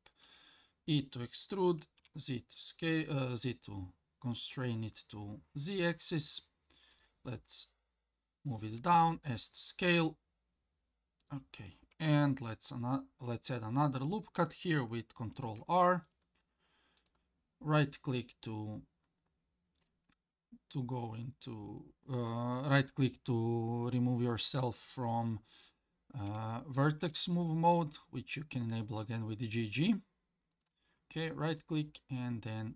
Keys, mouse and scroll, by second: 0.2 e, 8.8 s, 15.3 ctrl+r, 26.3 g, 31.5 s.